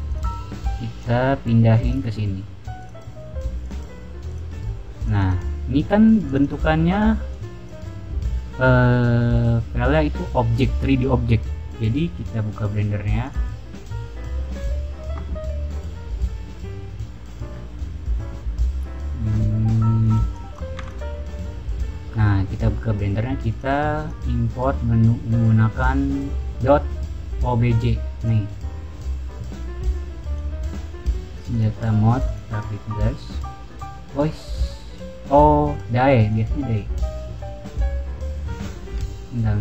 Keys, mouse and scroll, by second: 0.0 click, 0.2 click, 0.9 click, 2.7 click, 3.5 click, 4.2 click, 4.9 click, 6.2 click, 6.3 click, 7.2-7.6 drag, 13.2 click, 19.9 click, 20.3 click, 20.7 x, 20.7 click, 21.3 click, 23.4 click, 23.9 click, 28.1 click, 30.3 click, 31.2 click, 31.4 click, 32.1 click, 34.5 click, 35.6 click, 36.2 click, 37.0 click.